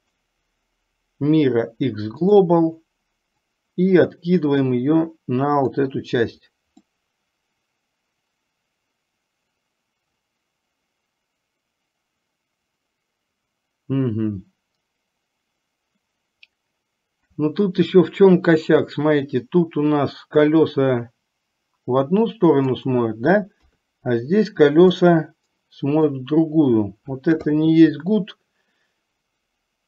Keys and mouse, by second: 0.3-2.7 right drag, 3.6-5.9 drag, 7.1-23.1 middle drag, 23.7 KP_3, 25.1-26.5 middle drag, 28.3-29.8 middle drag.